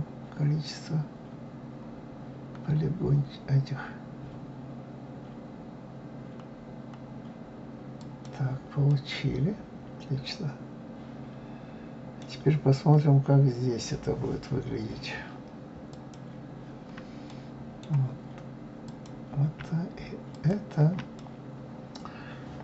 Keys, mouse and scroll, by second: 8.9-11.9 middle drag, 15.9 click, 17.3-18.8 middle drag, 18.8 click, 20.3 shift+click, 21.2-22.6 middle drag.